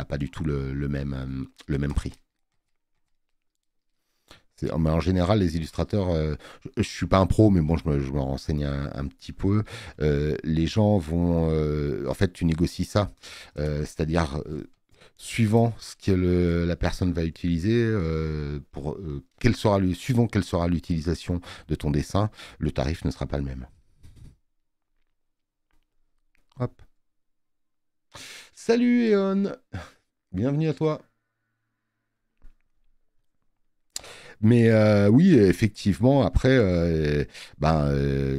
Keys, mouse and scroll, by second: 23.1 space, 23.4 click, 23.6 click.